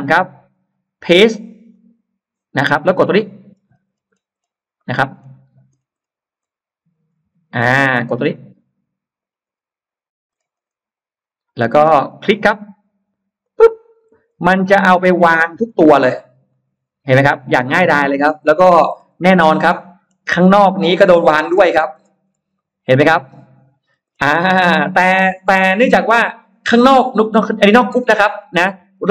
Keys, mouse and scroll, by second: 1.6 click, 3.3-3.6 scroll down 2, 3.8-5.1 scroll down 5, 4.6 middle click, 5.6 scroll down 1, 6.3 scroll up 2, 6.9-7.2 scroll up 2, 9.1 scroll down 2, 10.2 scroll up 2, 11.6-12.2 scroll up 2, 13.3 click, 14.1-14.4 scroll down 1, 15.1-16.6 scroll up 2, 16.4 middle click, 17.3-17.6 scroll down 1, 17.6 middle click, 18.0-18.8 scroll down 2, 18.6 space, 19.2 Escape, 19.5 scroll up 1, 20.0 scroll down 1, 20.4 middle click, 20.6-21.0 scroll down 1, 21.1-22.6 scroll up 2, 22.4-23.7 middle drag, 23.7-25.3 scroll down 4, 25.4 middle click, 25.6-25.9 scroll down 1, 27.0 click, 28.3-29.1 scroll up 3, 28.7 middle click.